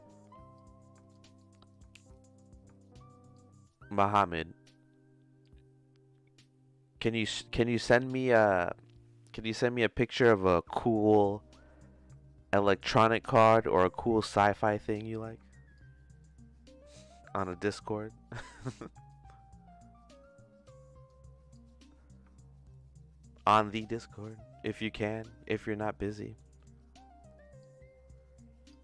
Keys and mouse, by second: 0.5 click, 1.4-2.9 drag, 3.3 click, 5.4-7.0 drag, 15.7-17.0 drag, 17.4-18.6 drag, 19.1-21.0 drag, 21.6-23.2 drag, 23.6-25.8 drag, 26.4 middle click, 27.6-28.7 drag.